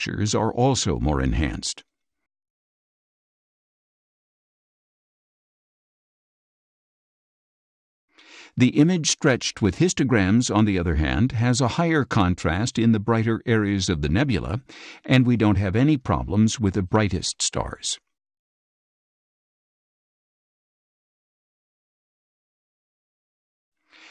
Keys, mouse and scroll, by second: 1.6 ctrl+shift+z, 2.4 ctrl+shift+z, 3.4 ctrl+shift+z, 4.7 shift+space, 5.0-6.4 drag, 7.1 ctrl+shift+z, 11.4 ctrl+shift+z, 12.5 ctrl+shift+z, 13.4 ctrl+shift+z, 14.5 ctrl+shift+z, 15.3 click, 15.3 space, 17.2 scroll down 2, 17.9 ctrl+shift+z, 19.1 ctrl+shift+z, 20.3 ctrl+shift+z, 21.5 ctrl+shift+z, 22.7 middle click, 22.8-23.4 scroll up 4.